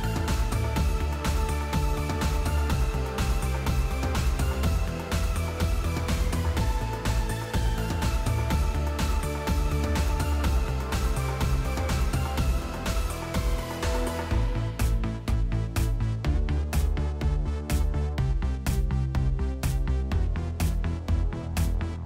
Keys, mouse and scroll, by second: 1.3 click, 2.0 click, 2.3 click, 3.9 click, 4.4-5.8 typing, 6.7 click, 7.8 click, 10.3 click, 10.6 click, 11.2 click, 11.8 click, 13.2-15.1 typing, 14.0 Tab, 15.2 Tab, 17.9-20.7 typing, 21.7-22.0 typing.